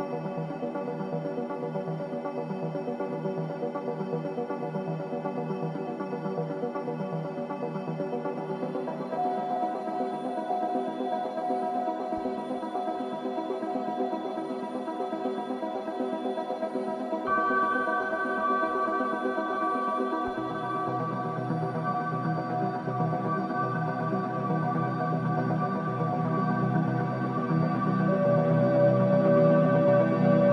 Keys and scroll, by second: 23.8 space, 26.4 space.